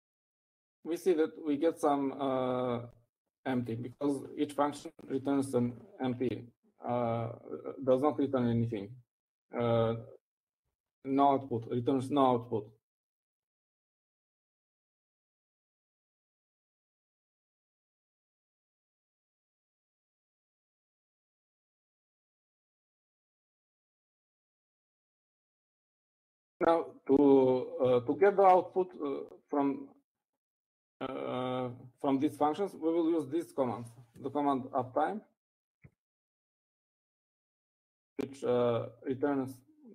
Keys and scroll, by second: 35.6-39.0 typing.